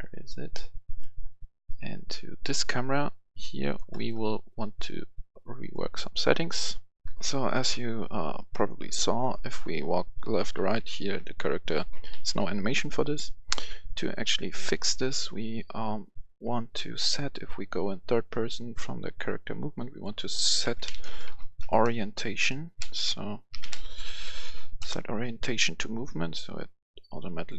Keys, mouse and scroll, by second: 0.3 right click, 3.1 click, 3.9 right click, 4.2 scroll down 1, 4.9 click, 5.9-6.3 scroll up 1, 7.0 F10, 7.7 click, 8.8-12.3 typing, 12.6 Escape, 13.8 right click, 15.2-20.6 drag, 20.6-23.6 typing, 24.8 Return, 25.8-27.5 drag.